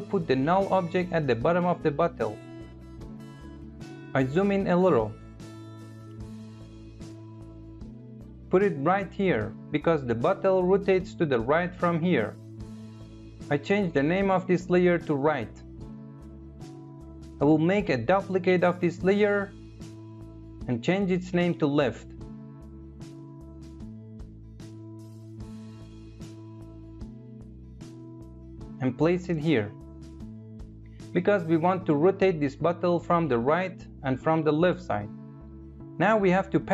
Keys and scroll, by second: 13.5 Return, 17.2 ctrl+d, 20.7 Return.